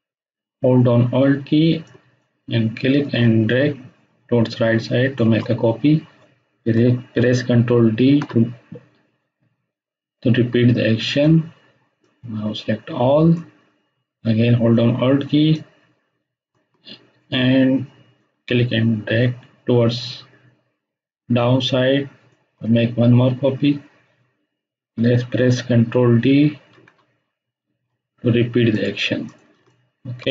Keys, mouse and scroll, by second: 1.6 alt+shift+Num_Lock, 1.6 shift+click, 1.8-5.3 alt+shift+drag, 7.9 ctrl+d, 11.1-13.5 drag, 15.5-22.4 alt+drag, 23.0 scroll down 1, 26.7 ctrl+d, 28.7 click, 29.6 ctrl+space, 29.6-30.3 ctrl+click, 30.0 ctrl+space.